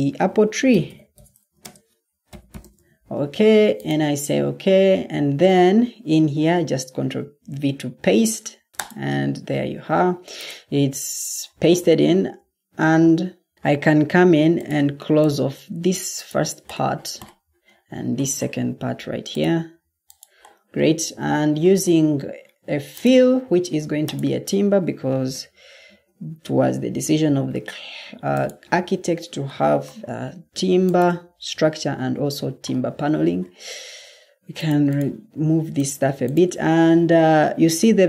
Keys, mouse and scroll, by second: 0.0-2.4 typing, 6.3 ctrl+v, 25.2-27.1 typing.